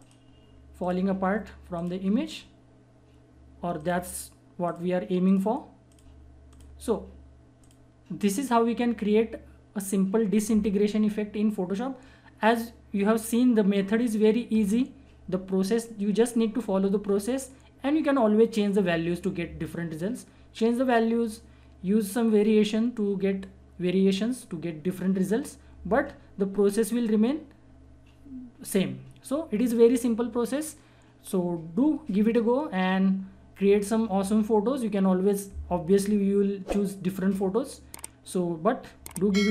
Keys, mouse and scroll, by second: 38.4-39.5 drag.